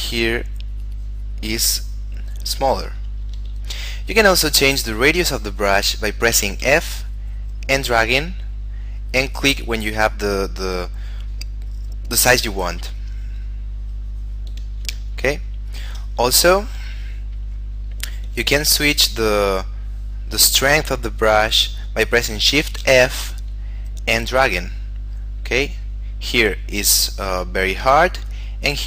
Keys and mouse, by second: 3.4 ctrl+z, 6.8 f, 13.1 click, 16.5 f, 17.9 click, 18.4 f, 19.1 click, 23.0 shift+f.